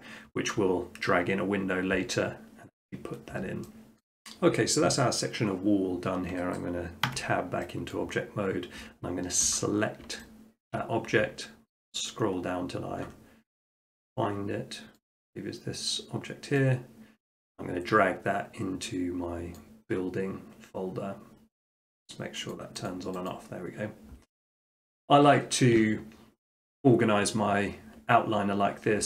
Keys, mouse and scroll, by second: 4.0 middle click, 7.1 Tab, 8.0 middle click, 8.1 middle click, 9.5 click, 10.7 shift+middle click, 11.3-12.9 scroll, 13.0-15.1 scroll, 15.1 click, 19.6 click, 22.0 click, 22.5-24.4 drag, 26.6-27.7 drag.